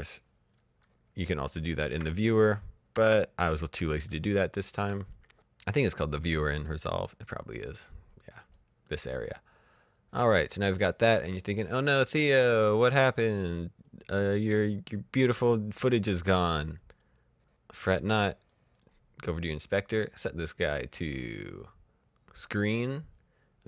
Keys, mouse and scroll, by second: 0.4 click, 1.5-1.9 ctrl+scroll up 1, 2.0-2.6 alt+scroll up 1, 2.8 alt+scroll down 1, 3.5 click, 3.7-4.1 shift+scroll up 2, 4.1 click, 6.2 click, 9.9 click, 20.4-22.5 scroll down 1, 22.5 click.